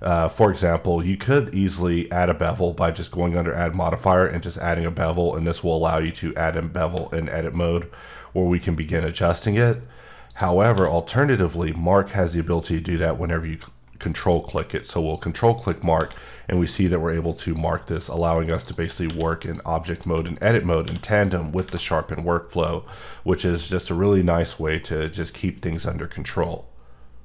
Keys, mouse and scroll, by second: 4.1 click, 5.2-5.7 scroll up 4, 10.3 click, 15.0 click, 16.5 scroll up 3, 17.4 click, 18.1 click, 18.6 click, 19.4 click, 19.9 click, 20.5 click, 21.1 click, 24.8 middle click.